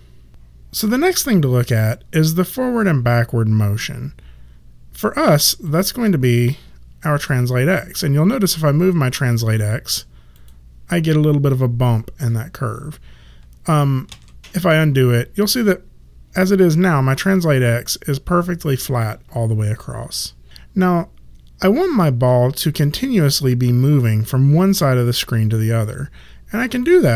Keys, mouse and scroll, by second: 5.6 click, 10.3 click, 14.0 ctrl+z, 26.8 click.